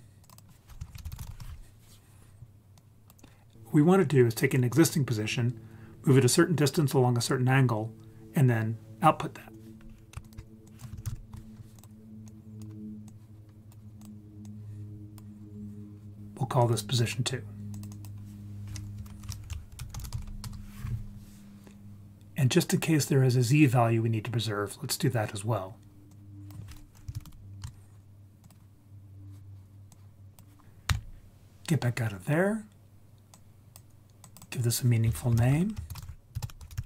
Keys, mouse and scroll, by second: 0.3-1.4 drag, 2.8 click, 10.2 ctrl+click, 10.2 ctrl+right click, 10.6 click, 11.1 d, 11.8 click, 12.3-12.6 drag, 13.1-13.7 drag, 14.0 drag, 14.4 click, 16.6 click, 17.9-20.5 drag, 26.1-27.6 drag, 28.4 click, 29.4-29.9 scroll down 1, 29.9-30.4 drag, 30.9 Tab, 33.3 click, 34.2-36.8 drag.